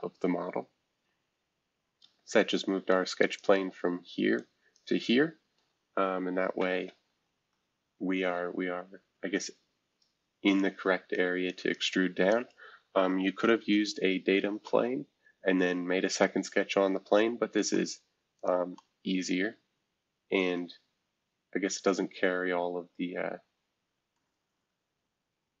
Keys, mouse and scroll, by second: 2.0 F2, 2.9-6.2 drag, 7.1 shift+F2, 10.5-12.3 drag, 13.2 shift+F2, 14.6-18.3 middle drag, 17.6 right click, 18.3-24.1 drag, 24.1-25.6 middle drag.